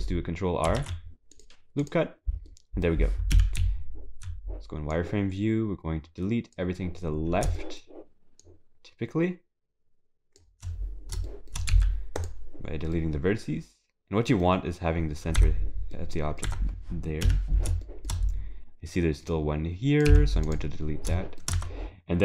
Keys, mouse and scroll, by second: 0.8 ctrl+r, 2.5 middle click, 3.3 KP_7, 3.6 z, 4.9 click, 7.1 scroll up 5, 7.6 shift+middle click, 8.4 shift+click, 10.9 scroll down 4, 11.3 shift+middle click, 11.7 x, 12.9 middle click, 15.4 Tab, 15.9 middle click, 16.5 Tab, 17.2 KP_7, 17.8 shift+middle click, 18.1 scroll up 1, 18.8 scroll up 9, 19.3 click, 20.1 x, 20.8-21.1 scroll down 9, 21.1 shift+middle click, 21.5 Tab.